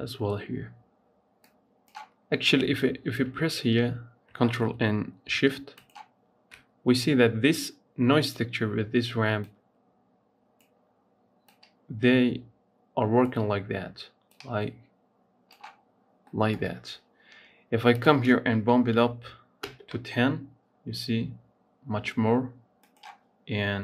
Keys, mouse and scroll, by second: 1.3-4.4 drag, 5.7 ctrl+shift+click, 9.2-15.7 drag, 15.7-16.1 scroll down 1, 16.1-17.9 middle drag, 17.9-20.7 drag, 22.7-23.8 drag.